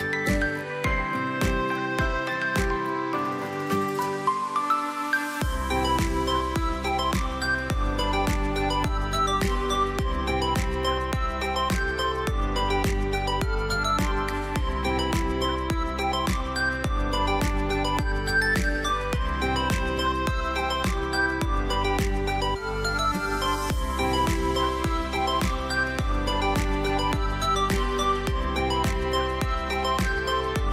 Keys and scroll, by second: 0.7 space, 1.6 ctrl+x, 2.6 ctrl+b, 3.0 space, 8.2 space, 9.2 ctrl+x, 10.1 ctrl+b, 15.2 alt+space, 18.4 space, 19.0 ctrl+v, 20.4 space, 27.9 space, 29.0 space, 29.7 space, 30.3 space.